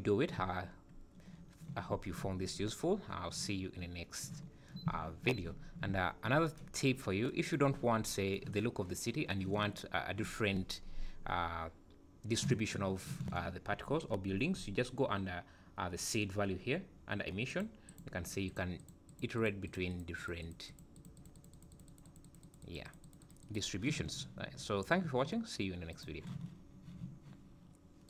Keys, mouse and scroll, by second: 0.5 `, 1.9 `, 2.8 scroll down 3, 4.8 `, 5.6 scroll up 3, 13.6-15.2 scroll up 24, 17.5 click, 17.9 click, 18.2 click, 18.6 click, 18.9 click, 19.2 click, 19.4 click, 19.7 click, 20.0-20.7 click, 20.3 click, 20.4 click, 21.1 click, 21.2 click, 21.4 click, 21.6 click, 21.7-22.1 click, 22.0 click, 22.2 click, 22.4 click, 22.6 click, 22.9 click, 23.1 click, 23.3 click, 23.5 click.